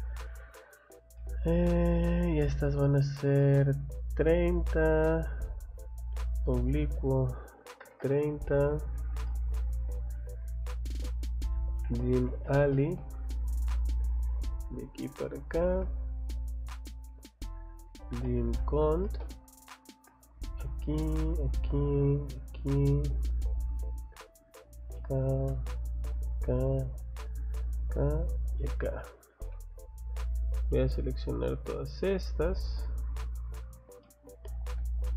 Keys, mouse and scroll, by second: 1.0 scroll up 1, 1.1 middle click, 1.8 click, 2.0 click, 2.9 click, 4.1 click, 5.3 click, 6.1 click, 8.9 Escape, 9.2 middle click, 11.3-12.9 typing, 14.2 click, 14.9 click, 16.7 click, 17.6-19.3 typing, 20.4 click, 21.3 click, 21.6 middle click, 21.6 scroll up 1, 22.3 click, 22.5 scroll down 2, 23.1 scroll up 2, 24.6 click, 25.0 middle click, 25.3 scroll up 2, 26.1 click, 26.3 scroll down 2, 26.8-27.7 scroll down 1, 27.7 click, 28.5 click, 28.7 Escape, 29.0 scroll down 1, 29.4 middle click, 30.1 middle click, 30.7 click, 31.1 click, 31.6 click, 31.8 click, 32.4 click, 32.6 click, 32.9 scroll down 1, 33.5 click, 33.7 click, 34.0 middle click, 34.4 scroll up 1, 34.7 click.